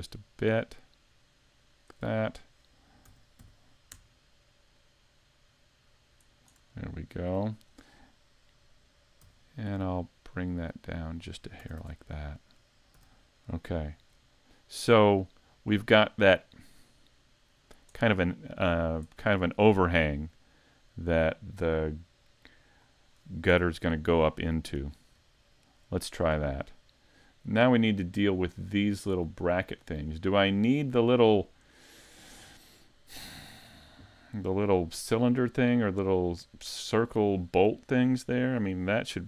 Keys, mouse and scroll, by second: 1.7 shift+click, 3.0 s, 6.4 shift+click, 6.8 middle click, 9.2 e, 11.3 click, 11.6 a, 11.8 Tab, 12.3 middle click, 13.0 a, 13.7 shift+middle click, 14.5 scroll up 1, 14.9 middle click, 18.1 middle click, 19.1 middle click, 20.1-20.8 scroll up 2, 20.8 right click, 22.2 click, 22.7 click, 23.1 scroll down 4, 23.5 a, 23.8 scroll down 1, 24.2 middle click, 24.9-25.3 scroll up 2, 25.3 shift+middle click, 26.3 scroll up 2, 28.1 middle click, 28.7 scroll up 2, 29.2 middle click, 30.0-30.4 scroll up 1, 30.4 middle click.